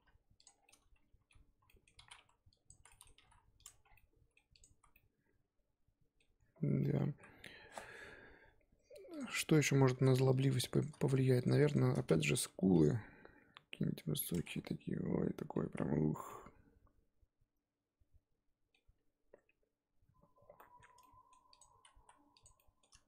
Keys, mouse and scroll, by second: 0.6 scroll down 2, 0.6 middle click, 1.6-2.0 scroll up 1, 2.0 z, 2.1 1, 2.7 click, 2.9 middle click, 3.1 g, 3.7 Tab, 3.8 scroll down 1, 3.9 middle click, 4.6 click, 4.7 z, 4.9-6.4 middle drag, 6.4-6.8 scroll up 2, 6.8 middle click, 7.1 z, 8.6-9.2 scroll up 2, 9.2 click, 9.3 Tab, 9.6 z, 10.4 click, 10.8 shift+click, 11.0 z, 11.4 shift+click, 11.7 shift+click, 12.3 g, 14.4 Tab, 14.4 scroll down 2, 14.6 middle click, 15.6 z, 15.9-16.2 scroll down 2, 16.2-18.8 middle drag, 18.8-20.5 scroll up 2, 20.5 middle click, 20.9 Tab, 21.0 middle click, 21.5 click, 22.0 z, 22.4 click, 22.5 middle click.